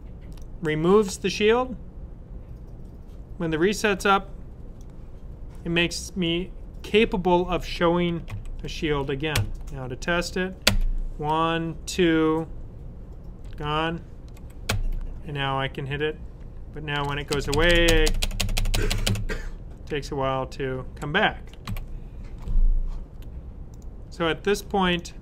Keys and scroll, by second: 8.2 super+s, 13.4 Up, 21.6 super+w.